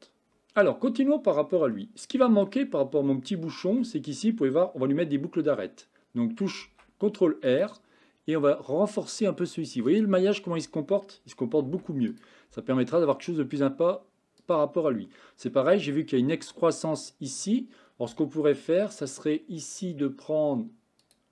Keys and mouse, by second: 1.8-2.5 shift+middle drag, 3.7 Tab, 6.7 ctrl+r, 11.7 ctrl+r, 15.5 middle click, 21.1 click.